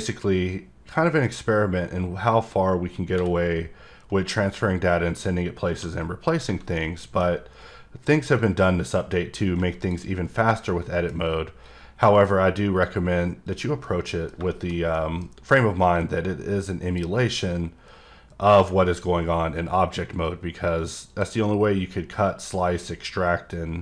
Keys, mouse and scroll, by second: 6.3 scroll down 2, 6.7 middle click, 7.4 scroll up 1, 8.4-9.7 drag, 10.7 middle click, 11.9 click, 13.5 click, 13.8 middle click, 14.5 middle click, 14.9 middle click, 15.9 click, 17.5 click, 21.1 click, 22.4 click.